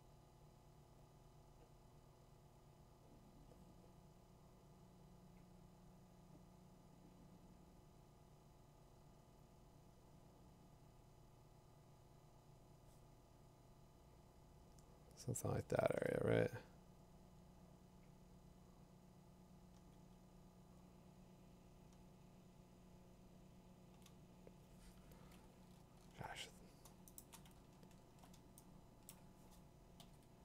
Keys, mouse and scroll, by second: 0.0 click, 1.2 click, 2.4 click, 3.4 click, 4.7 click, 8.2 click, 9.8 click, 12.8 click, 13.8 click, 14.6 click, 16.2-17.2 scroll, 19.7-20.1 click, 21.3 click, 21.4 click, 21.7 click, 22.0 click, 22.1 click, 22.3 click, 22.6 click, 22.7 click, 22.7 click, 23.9 click, 25.5 scroll, 26.0 middle click, 26.0 middle click, 27.2 click, 27.6 scroll, 27.7 middle click, 27.8 middle click, 28.0 middle click, 28.1 middle click, 28.9 2, 29.1 click, 29.1 7, 29.5 0.